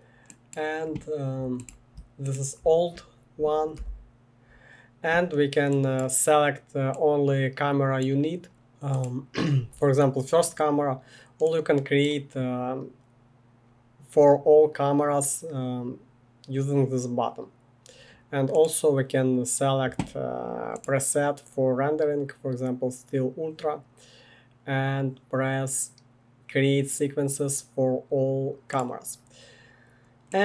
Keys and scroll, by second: 3.7 Delete, 8.3-9.0 typing.